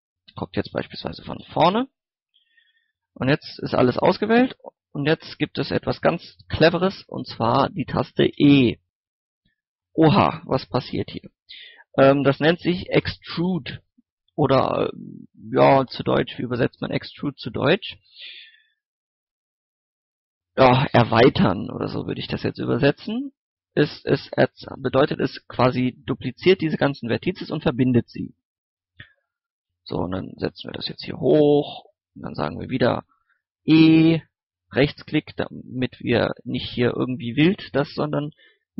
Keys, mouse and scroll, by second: 0.4 KP_3, 1.3 KP_1, 3.2 middle click, 3.5 scroll up 1, 3.9-5.0 typing, 8.3 e, 19.3 right click, 23.8 click, 24.6 scroll up 1, 25.7 middle click, 29.3 click, 29.6 scroll down 1, 29.9 middle click, 30.4 scroll down 1, 30.6 middle click, 31.0 click, 32.2 shift+middle click, 33.1 KP_1, 33.6 e, 33.8 right click, 36.7 g, 37.6 right click.